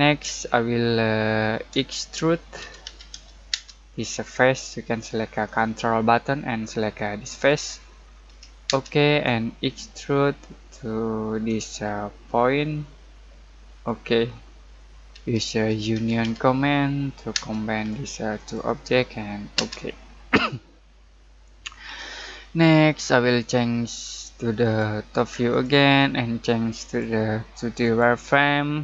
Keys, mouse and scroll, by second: 0.5 shift+middle click, 1.7-2.6 scroll up 1, 2.3-3.6 typing, 3.9-5.3 scroll up 1, 7.3 ctrl+click, 8.0-8.6 scroll down 1, 8.6 space, 9.7 shift+middle click, 11.7-13.6 scroll up 1, 13.7 click, 14.3-14.7 scroll down 1, 14.7 middle click, 15.4-17.3 typing, 17.7 click, 19.5 space, 22.6-23.4 scroll down 1, 25.4 click, 28.5-28.8 scroll down 1.